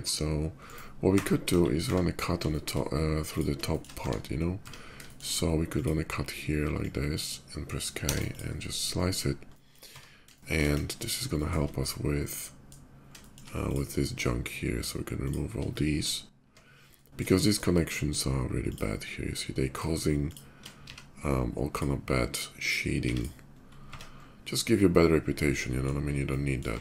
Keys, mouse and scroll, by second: 0.4 click, 0.7 Tab, 1.2 KP_5, 1.6 Tab, 2.2 shift+middle click, 3.1 click, 3.5 middle click, 3.8 Tab, 4.8 shift+middle click, 4.9 shift+Tab, 5.3 click, 6.5-7.9 shift+drag, 8.0 click, 9.2 middle drag, 9.8 Tab, 10.1 shift+middle click, 10.5 KP_5, 11.1 shift+middle click, 11.5 middle click, 13.0 shift+middle click, 13.4 shift+click, 15.0 shift+click, 15.5 Tab, 16.3 Tab, 16.6 middle click, 17.1 shift+middle click, 18.4 click, 19.5 click, 20.0 click, 20.6 x, 21.5 click, 22.3 click, 22.8 click, 23.4 middle click, 23.6 Tab, 24.6 middle click, 24.9 middle click, 25.1-25.6 middle drag, 25.9-26.3 middle drag, 26.6-26.8 middle drag.